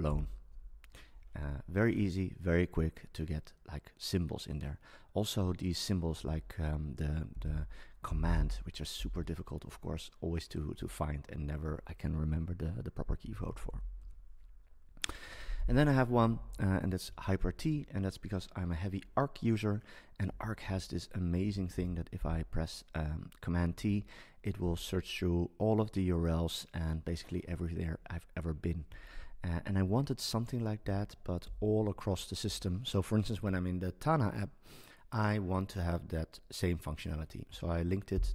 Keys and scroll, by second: 6.2 BackSpace, 13.7 BackSpace, 16.3 Down, 16.5 Up, 17.2 shift+super+Right, 17.6 Left, 21.7 super+t, 38.1 super+t.